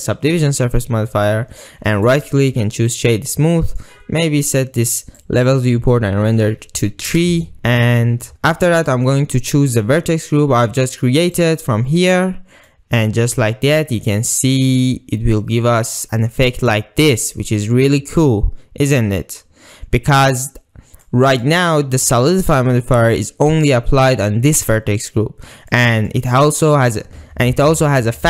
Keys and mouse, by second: 0.9-1.3 middle drag, 2.1-3.2 drag, 3.5-3.9 middle drag, 5.3-7.2 drag, 7.5 middle click, 8.1 middle click, 8.7 ctrl+middle click, 11.4-15.3 drag, 15.3-17.8 middle drag, 18.3-19.9 middle drag, 20.1 middle click, 21.1 middle click, 25.8 middle click.